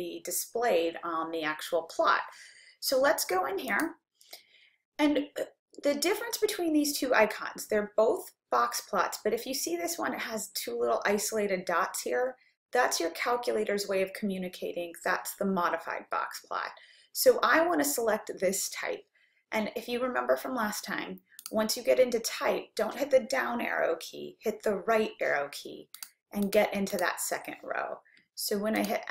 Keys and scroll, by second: 3.8 Return, 21.5 Down, 26.0 Right, 26.5 Right, 27.2 Right, 28.8 Return.